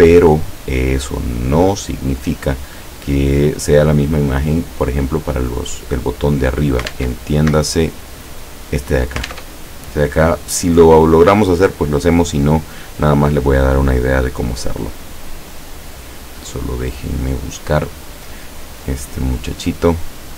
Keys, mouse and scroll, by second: 7.0 alt+Tab, 9.3 alt+Tab, 15.1 click, 16.0 click, 17.7 click, 18.6 click.